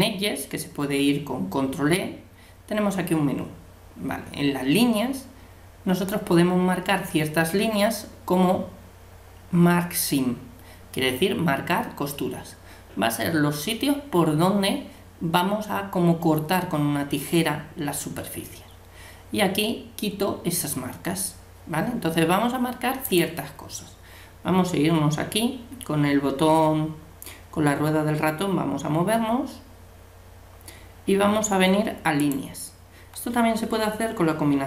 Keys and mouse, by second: 28.0-32.2 middle drag, 32.2-34.0 drag.